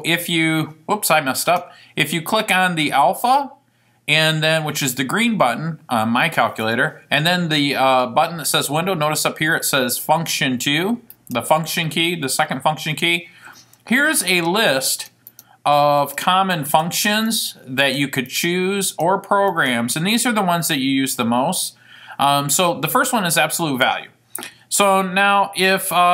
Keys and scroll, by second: 15.1 Down, 15.5 Down, 16.8 Down, 17.4 Down, 18.4 Down, 19.0 Down, 19.7 Down.